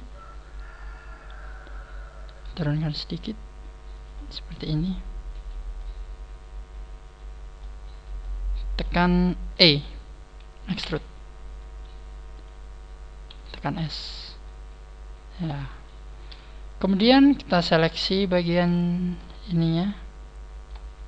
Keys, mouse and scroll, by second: 0.1 shift+right click, 2.2 scroll up 1, 2.2 g, 4.7 click, 4.7-5.4 scroll down 4, 5.7 middle click, 5.7 scroll down 1, 6.9 middle click, 7.8 scroll up 3, 8.1 middle click, 10.7 e, 12.4 click, 13.3 s, 14.4 click, 14.4 middle click, 16.1 scroll up 2, 16.6 right click, 17.2 shift+right click, 18.1-18.4 scroll up 3, 18.5 shift+right click, 19.3 alt+shift+right click, 20.2 scroll down 4, 20.9 alt+shift+right click.